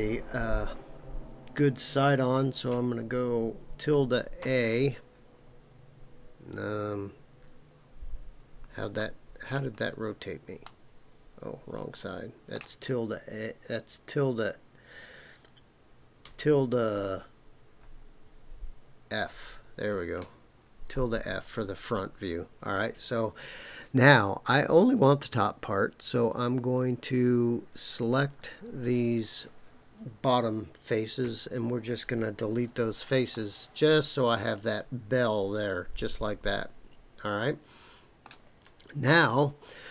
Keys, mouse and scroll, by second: 8.5-8.9 scroll down 1, 8.9 middle click, 9.7-10.7 scroll down 5, 10.7-12.6 middle drag, 20.6-25.2 scroll up 9, 27.0-28.3 drag, 31.2 Delete, 33.3-38.3 middle drag.